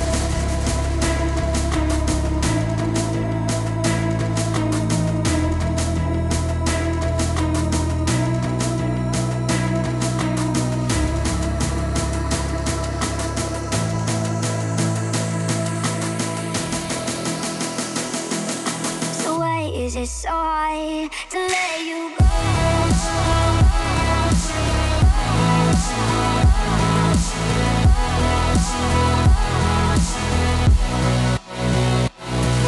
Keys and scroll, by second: 4.2 u, 6.3 u, 8.5 F9, 10.7 F9.